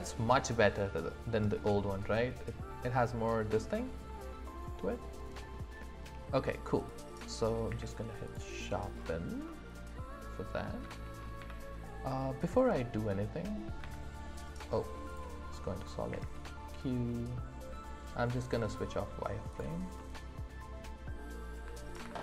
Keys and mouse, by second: 0.3-5.5 middle drag, 6.8 click, 7.7 q, 9.4 click, 9.4 right click, 10.5 click, 10.5 right click, 11.4 z, 13.8 z, 15.8 click, 16.1 q, 20.0-21.1 middle drag, 21.9 ctrl+s.